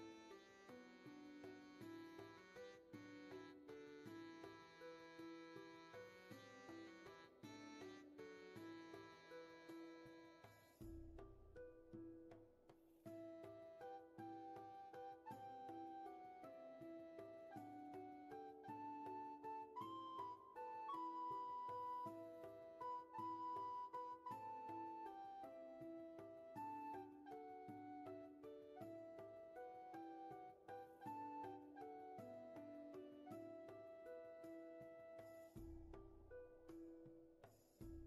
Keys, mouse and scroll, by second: 0.0-1.6 scroll up 1, 3.1-4.2 scroll down 1, 4.2-6.2 scroll up 1, 11.5 ctrl+z, 17.9 ctrl+z, 22.2 ctrl+z, 23.4-24.5 scroll up 1, 26.9 space, 28.0 scroll down 1, 28.5 space, 29.1 scroll down 1, 29.3 space.